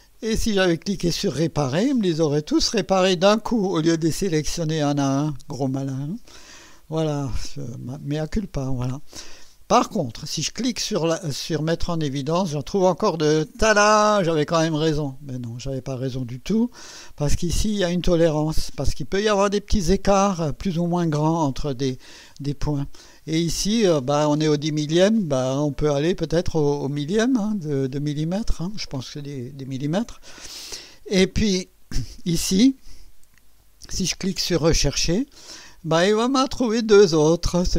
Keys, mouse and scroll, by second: 0.1 click, 1.5 click, 12.0 click, 25.4 click, 27.5 click, 30.6 scroll down 2, 35.1 click.